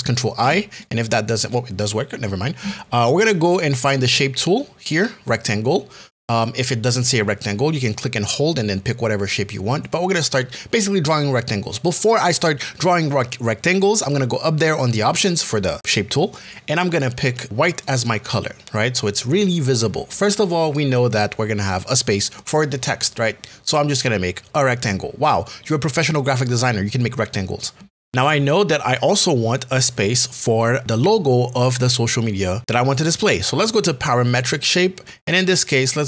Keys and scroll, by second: 0.5 ctrl+i.